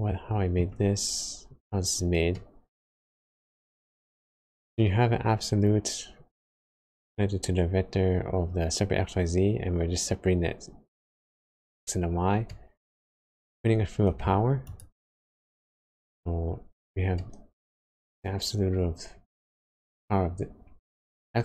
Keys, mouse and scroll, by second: 0.8-2.0 scroll up 12, 2.3 middle click, 3.2-3.7 scroll up 2, 3.8-4.1 scroll down 3, 12.4 middle click, 13.4 click, 17.1 middle click, 17.9 scroll up 2.